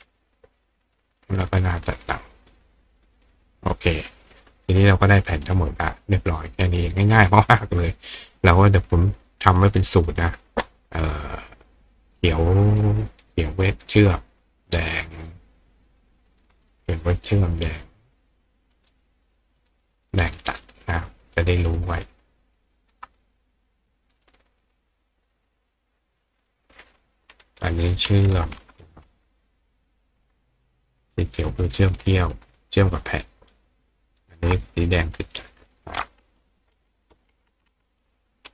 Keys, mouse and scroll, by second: 0.3-1.4 drag, 2.4 click, 3.1 click, 4.0 click, 5.1 click, 5.4 right click, 6.7 click, 8.2 right click, 9.4 click, 11.4 click, 12.1 click, 12.7 right click, 17.7-18.9 drag, 18.7 right click, 19.5 click, 21.3-22.7 ctrl+drag, 23.1 click, 25.5 click, 26.4 click, 31.2 click, 31.6 click, 33.3-34.3 ctrl+drag, 34.2 ctrl+right click, 35.3 click, 36.1 right click.